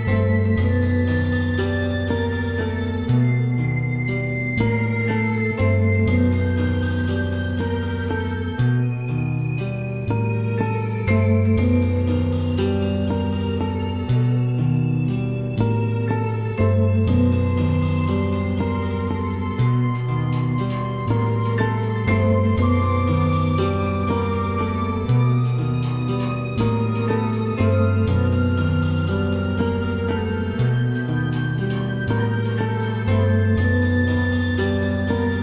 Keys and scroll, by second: 4.3 [, 7.3 ], 11.1 [, 13.8 ], 18.5 [, 21.8 ], 24.3 [, 28.5 [.